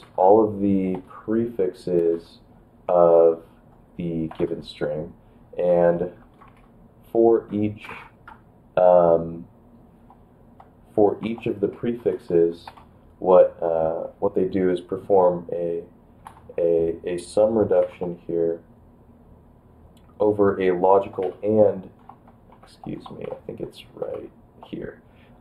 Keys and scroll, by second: 0.7 d, 0.7 BackSpace, 1.1 c, 2.1 x, 3.1 ctrl+b, 3.2 ctrl+b, 4.3 space, 4.5 ctrl+b, 5.8 shift+[, 6.2 space, 6.5 shift+], 11.2 2, 12.0 ctrl+b, 12.1 ctrl+b, 12.3 ctrl+b, 12.7 space, 16.3 shift+=, 17.8 5, 21.4-24.1 typing.